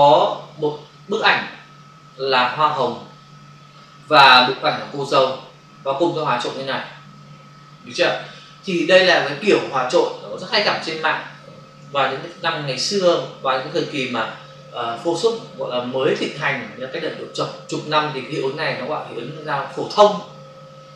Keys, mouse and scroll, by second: 4.7 click, 6.2 click.